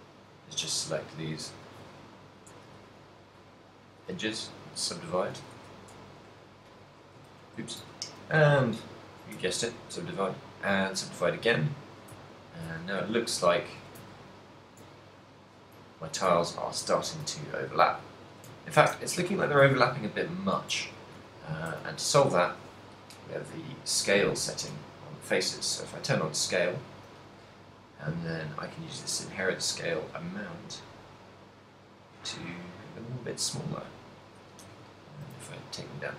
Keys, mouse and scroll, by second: 0.7 ctrl+click, 1.9 ctrl+click, 2.8 w, 4.3 z, 4.7 middle click, 5.5 a, 6.1 a, 6.1 e, 7.3 right click, 7.8 ctrl+z, 7.8 w, 11.0 middle click, 11.0 w, 12.5 ctrl+middle click, 13.0 z, 13.3 middle click, 14.0 z, 14.4 middle click, 15.1 middle click, 16.2 shift+middle click, 16.6 ctrl+middle click, 17.6 shift+middle click, 18.5 shift+middle click, 18.7 ctrl+middle click, 20.9 Tab, 21.7 z, 22.6 z, 25.8 click, 28.2 click, 35.1 ctrl+middle click, 35.4 a.